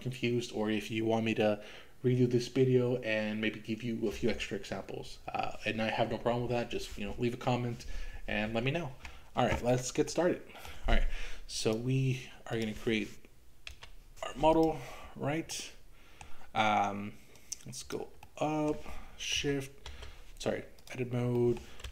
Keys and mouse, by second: 10.1 middle click, 11.6 click, 12.5 click, 13.7 Delete, 14.6 click, 15.5 middle click, 17.4 click, 18.3-19.9 middle drag, 19.9 Tab, 21.5 middle click.